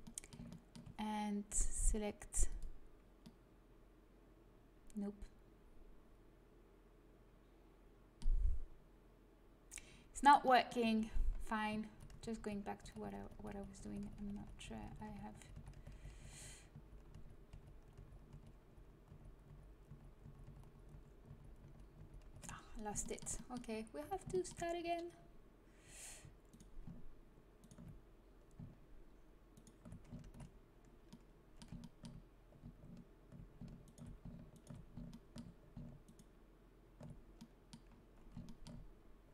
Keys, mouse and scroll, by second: 2.6 ctrl+z, 2.6 click, 3.5-4.5 middle drag, 10.8 a, 11.9 ctrl+z, 12.1 ctrl+z, 12.5 ctrl+z, 12.8 ctrl+z, 13.0-14.9 ctrl+z, 15.0 ctrl+z, 15.3 ctrl+z, 15.5 ctrl+z, 15.7 ctrl+z, 15.9 ctrl+z, 16.1 ctrl+z, 16.3 ctrl+z, 16.7 ctrl+z, 17.1 ctrl+z, 17.5 ctrl+z, 18.3 ctrl+z, 18.6 ctrl+z, 19.1 ctrl+z, 19.4 ctrl+z, 19.8 ctrl+z, 20.2 ctrl+z, 20.4 ctrl+z, 20.6 ctrl+z, 20.9 ctrl+z, 21.2 ctrl+z, 21.6 ctrl+z, 21.9 ctrl+z, 22.2 ctrl+z, 22.4-24.0 middle drag, 24.0 a, 30.2 ctrl+z, 33.8-37.1 right drag, 35.1-37.9 drag, 37.4 right click, 37.9 middle click.